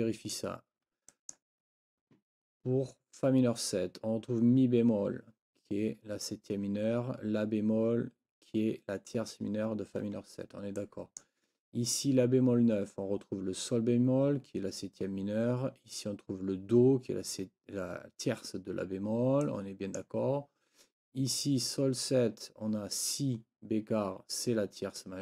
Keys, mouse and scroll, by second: 1.1 click, 10.8 click, 11.1-11.4 scroll up 1, 19.4 scroll up 1, 19.6 click, 25.0 scroll up 2.